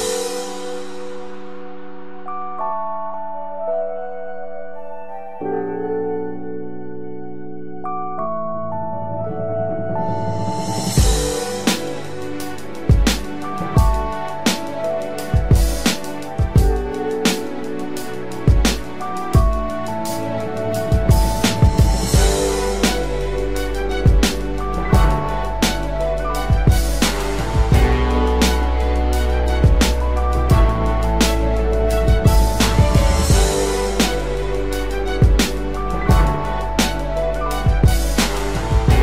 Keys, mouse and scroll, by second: 15.0-15.7 typing, 17.5-18.3 typing, 17.6 double click, 20.4 double click, 21.9 typing, 23.1 double click.